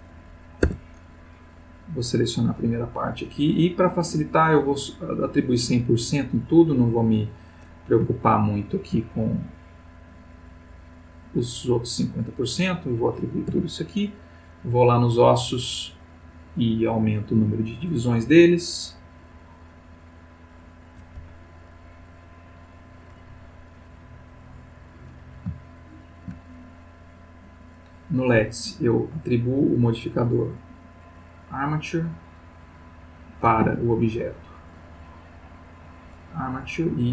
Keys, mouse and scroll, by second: 0.6 Tab, 1.3-2.6 drag, 5.0-5.7 drag, 7.4 click, 8.1 shift+middle click, 9.4-10.9 drag, 11.9 click, 12.7 click, 13.5 Tab, 14.0 click, 15.7 click, 16.7 click, 17.0 click, 17.7 click, 18.8 click, 20.3 click, 21.2 Escape, 22.0 click, 22.4 click, 24.8 click, 25.6-26.4 shift+middle drag, 27.6 click, 28.9 click, 29.5 click, 31.6 click, 32.7 click, 33.6 Escape, 34.4 click, 35.7 click.